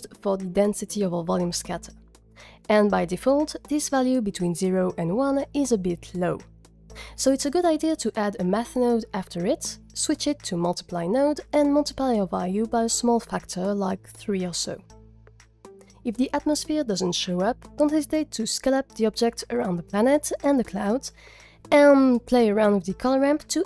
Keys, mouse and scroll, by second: 4.2-6.6 drag, 7.8 click, 8.3 g, 8.8 drag, 9.0 shift+a, 10.6-11.2 drag, 12.1-14.8 drag, 16.0 scroll down 3, 16.3 click, 16.5 g, 17.1-17.5 scroll up 5, 17.6 click, 19.0 click, 20.2 z, 20.8 s, 21.8 click, 22.0 z, 23.5 click.